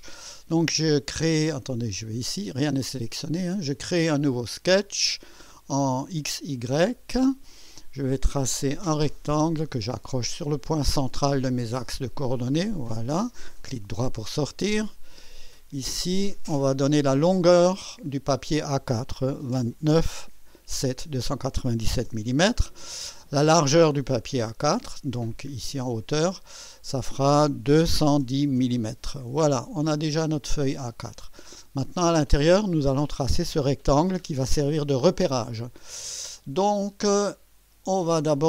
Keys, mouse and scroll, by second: 2.0 click, 2.6 click, 4.5 click, 6.7 click, 8.6 click, 10.6 click, 12.5 click, 13.6 right click, 15.9 click, 17.5 click, 19.6 KP_2, 20.0 KP_9, 20.8 KP_7, 22.1 Return, 24.5 click, 26.2 click, 27.7 KP_2, 28.0 KP_1, 28.2 KP_0, 28.6 KP_Enter, 29.6-30.2 scroll down 4, 31.0 scroll up 2, 31.4 right click, 36.0 right click.